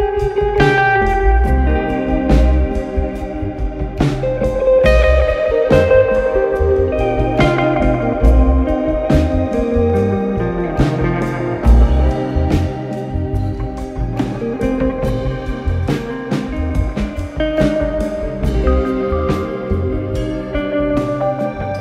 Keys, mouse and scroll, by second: 2.4-2.7 drag, 3.5 click, 13.2 alt+scroll, 13.8 click, 14.9 click, 15.3 scroll, 15.9 middle click, 16.3 click, 17.0 z, 17.0 middle click, 18.1 right click, 19.4 click, 21.6 click.